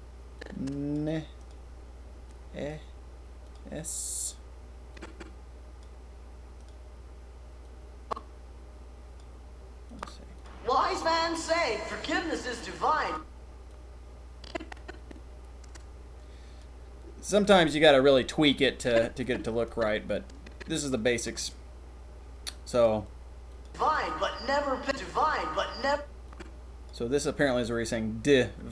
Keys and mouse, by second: 0.3-0.9 drag, 2.2-2.7 drag, 4.9-5.8 drag, 6.5 click, 7.6-9.1 drag, 9.8 click, 10.4 click, 13.0 click, 13.7-16.6 drag, 18.8-22.8 drag, 22.8-23.5 middle drag, 23.5 click, 23.6 middle click, 23.9 click, 24.0 middle click, 24.8 click, 25.8 click, 26.2 click.